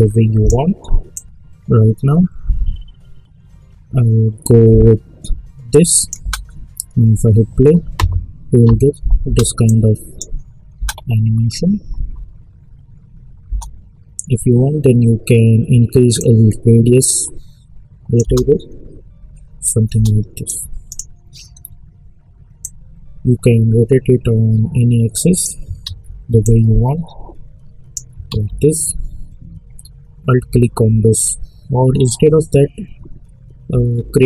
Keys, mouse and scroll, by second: 6.2 space, 9.2 space, 9.6 click, 10.7 space, 13.4 space, 16.1-18.2 drag, 18.2 space, 20.4-25.8 drag, 25.8 ctrl+z, 26.4-28.2 drag, 28.2 ctrl+z.